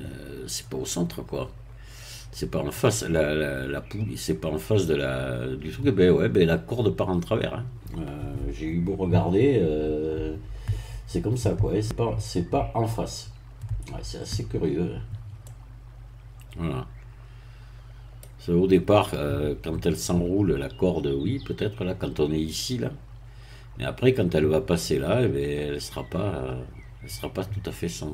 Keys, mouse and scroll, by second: 15.4-18.4 middle drag.